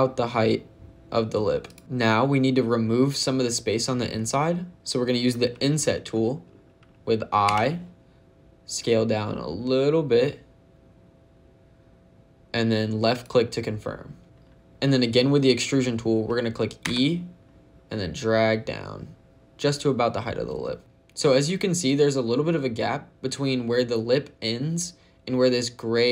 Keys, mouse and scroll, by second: 1.5 click, 1.8 shift+middle click, 7.3 i, 13.0 click, 16.7 e.